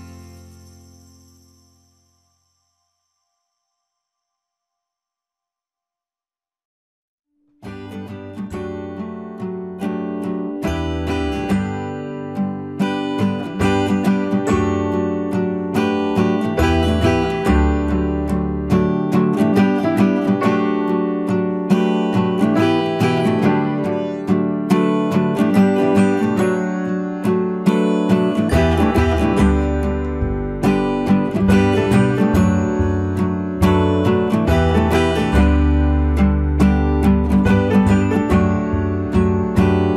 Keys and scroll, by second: 12.7 ctrl+t, 20.5 Return, 24.8 ctrl+t, 30.3 Return.